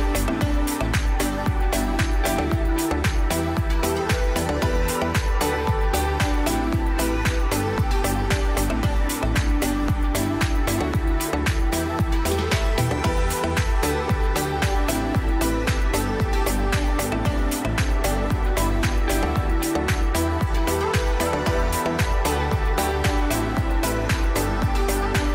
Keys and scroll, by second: 9.3 c, 9.9 c, 12.7 shift+F2, 13.1 shift+Page_Up, 13.4 F3, 14.0 Escape, 22.8 Escape, 24.2 c, 24.4 e, 24.8 ctrl+g.